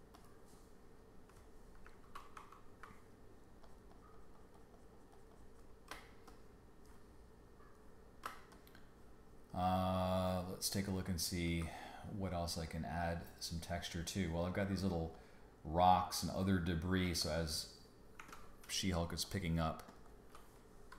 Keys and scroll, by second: 2.3 super+-, 5.9 space, 7.1 space, 8.2 space, 18.2 w.